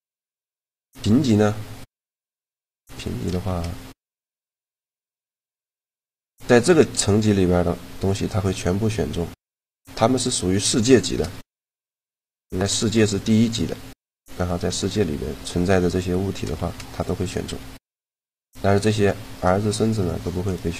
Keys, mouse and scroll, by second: 3.2 shift+g, 5.3-6.5 drag, 6.5 middle click, 7.3 g, 9.9-15.0 drag, 13.2-15.0 right drag, 14.2 g, 15.0 middle click, 16.3 shift+g, 17.3 g, 19.1 right click, 19.6 g.